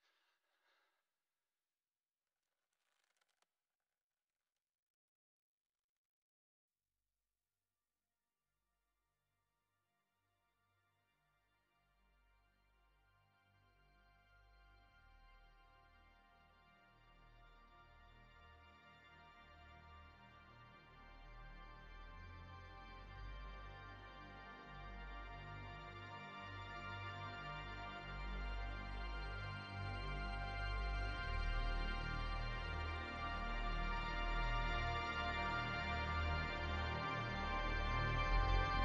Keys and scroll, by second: 1.6 space, 5.0 space, 8.0 space, 11.4 space, 13.5 space, 16.1 space, 18.5 space, 21.2 space, 22.1 space, 36.3 space, 37.5 space.